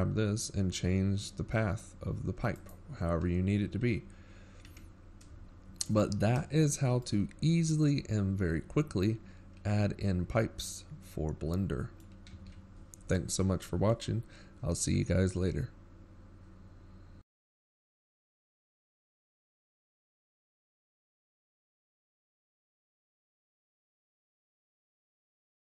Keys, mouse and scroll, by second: 3.3-3.8 scroll down 9, 3.8 Tab, 4.5-5.0 shift+scroll down 1, 5.5-6.0 shift+scroll down 22, 6.0-6.6 scroll up 6, 7.4 right click, 7.8 g, 11.3-11.9 scroll down 4, 11.9 a, 12.9 Tab, 13.7-14.3 shift+scroll up 7, 14.3-14.8 scroll down 4, 14.8 shift+scroll up 1, 15.3 middle click, 20.7 a.